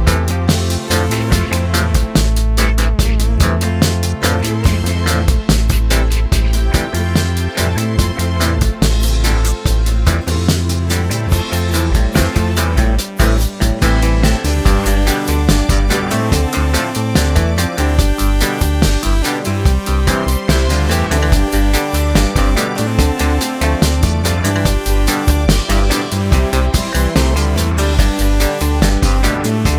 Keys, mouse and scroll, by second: 2.9-3.8 scroll down 2, 3.8 shift+d, 8.8 scroll up 1, 9.0 middle click, 9.3 scroll up 2, 9.4-12.5 middle drag, 12.5-13.8 drag, 13.8-15.4 scroll down 2, 14.0 middle click, 15.4 scroll down 1, 15.7 click, 16.1 middle click, 16.2 scroll down 1, 16.3 scroll up 2, 16.5 shift+middle click, 17.0 shift+d, 19.7-21.2 middle drag, 21.2 click, 21.9 scroll down 1, 22.1 shift+d, 23.3-24.5 middle drag, 24.5 r, 25.7 middle click, 25.8-26.2 scroll up 2, 26.2 g, 27.2-28.4 middle drag, 28.4-28.7 scroll down 1, 28.7-29.7 middle drag.